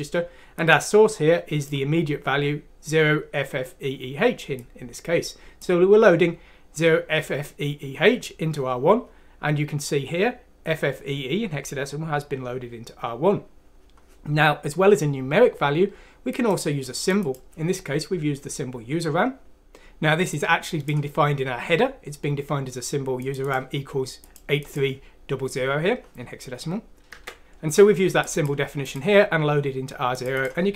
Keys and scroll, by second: 27.8 ctrl+z.